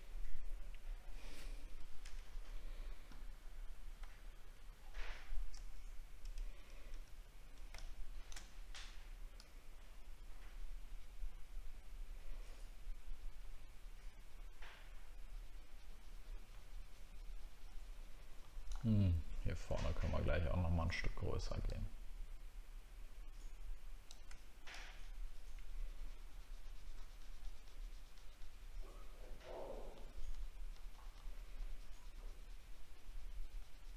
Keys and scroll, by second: 4.0 alt+scroll down 1, 5.6 alt+scroll down 1.